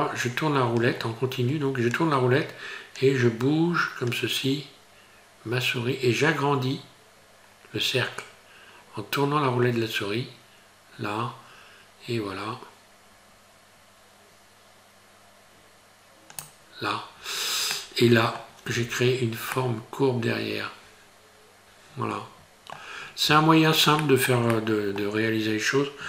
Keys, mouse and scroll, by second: 17.7 middle click, 18.7 Tab, 19.2-19.5 scroll down 3, 19.5 middle click, 23.0 scroll up 3, 23.3 Tab, 24.0 shift+middle click, 24.5 middle click.